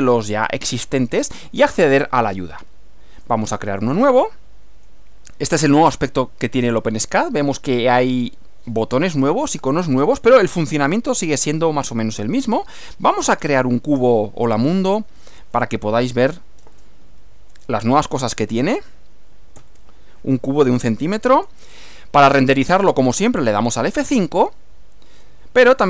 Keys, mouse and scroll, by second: 3.2 click, 12.5 click, 13.0-14.7 typing, 14.8 shift+Left, 15.6 alt+Left, 16.1 alt+1, 16.3 alt+0, 16.4 alt+,, 16.7 alt+space, 16.9 1, 17.1 alt+0, 17.3 alt+,, 17.5 space, 17.7 alt+1, 17.9 alt+0, 18.5 Right, 19.6 shift+,, 21.4 Return, 25.1 F5.